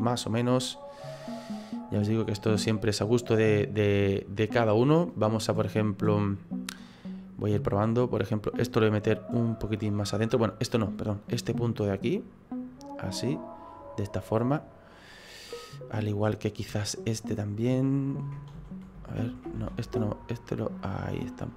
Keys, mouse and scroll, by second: 0.2 middle click, 5.1 click, 5.7 middle click, 7.0 middle click, 8.2 right click, 10.9 click, 11.9 right click, 12.8 click, 16.1 right click, 16.9 click, 18.5 ctrl+z, 19.0 ctrl+z, 20.6 click.